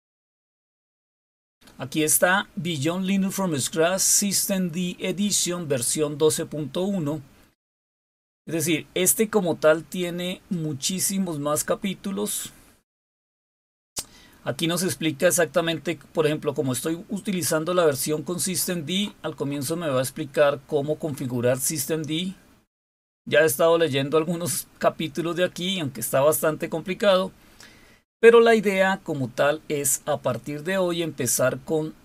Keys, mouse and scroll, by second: 6.1-7.5 scroll down 4, 8.0-10.8 scroll down 8, 11.3-12.4 scroll down 4, 12.9 scroll down 1, 13.4 scroll down 1, 14.1-16.4 scroll down 5, 16.6-20.1 scroll up 5, 20.8 scroll up 2, 21.6 scroll up 2, 22.2-23.4 scroll up 2, 23.9-25.4 scroll up 2.